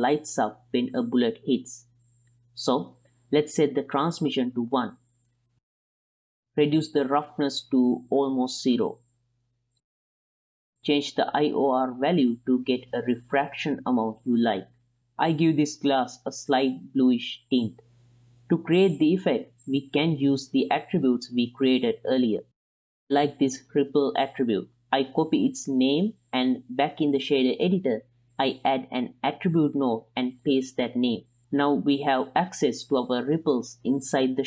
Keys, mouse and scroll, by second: 3.5 click, 4.5 click, 6.6 middle click, 7.3-9.8 drag, 9.8-10.1 ctrl+middle drag, 11.5 click, 12.5 click, 13.8 ctrl+middle click, 14.0-14.7 middle drag, 15.2 click, 19.2 middle click, 21.8 middle click, 22.0 ctrl+middle click, 22.3 middle click, 22.9 middle click, 23.2 ctrl+middle click, 23.4 middle click, 23.8 click, 24.8 ctrl+c, 25.9 click, 27.6 shift+a, 31.5 ctrl+v, 32.6 ctrl+shift+click, 33.2 ctrl+shift+click, 33.6-34.4 middle drag.